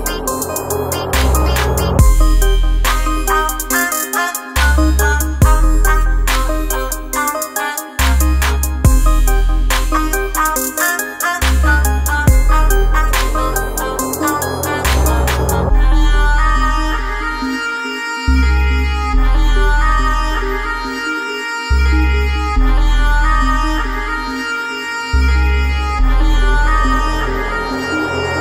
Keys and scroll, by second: 10.2 BackSpace, 13.3 alt+space, 19.6 alt+space, 20.1 alt+space, 20.8 alt+space, 23.7 alt+space, 24.2 alt+space, 24.7 alt+space, 26.9 Up.